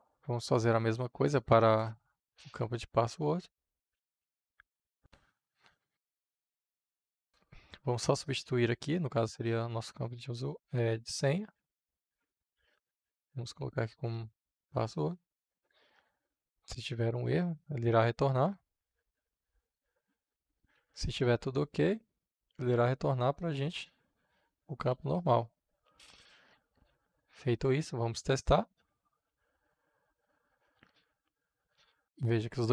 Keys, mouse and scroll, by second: 0.1-1.5 drag, 1.5 Return, 3.4 ctrl+v, 7.1-11.5 drag, 11.5 Right, 12.4 Return, 13.3-14.2 typing, 14.3 Return, 16.8-18.5 drag, 19.1 ctrl+c, 19.5 click, 20.3 Return, 20.7 ctrl+v, 22.8-24.5 drag, 24.8 shift+o, 25.1 k, 26.0 click, 26.9 ctrl+s, 27.6-29.4 middle drag, 29.4 F5, 30.8-32.7 drag.